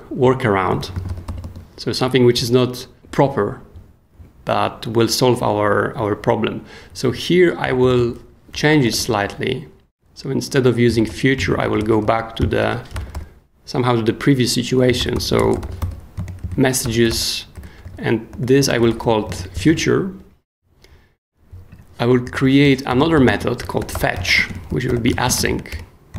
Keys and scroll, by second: 0.7 super+p, 0.8-1.7 typing, 2.0 Down, 2.3 Return, 7.6 k, 8.7 y, 9.0 p, 10.6-13.6 typing, 14.6-19.4 typing, 19.7 super+s, 22.0-25.9 typing.